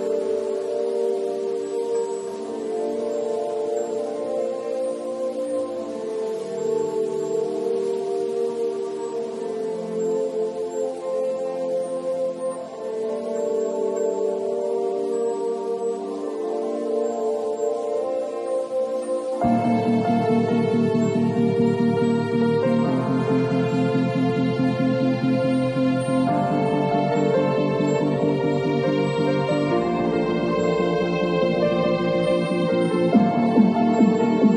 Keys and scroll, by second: 4.6 v, 5.0 space, 7.8 super+l, 13.1 Return, 19.8 b, 23.5 super+z, 24.2 super+x.